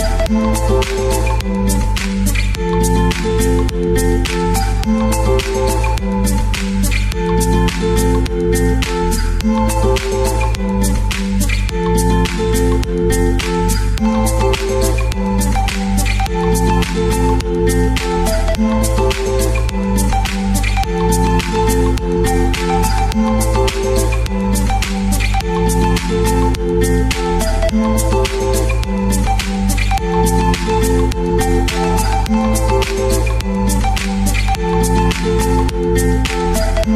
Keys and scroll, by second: 10.2 Right, 10.4 Right, 10.5 Right, 11.2 Right, 11.4 Right, 12.0 Down, 12.2 Down, 17.5 space, 22.6 alt+Right, 22.7 alt+Right, 22.8 alt+Right, 23.0 alt+Right, 23.1 alt+Right, 24.0 Down, 24.3 Down, 27.9 space, 33.2 space, 35.7 Page_Down, 35.8 Page_Down, 36.0 Page_Down.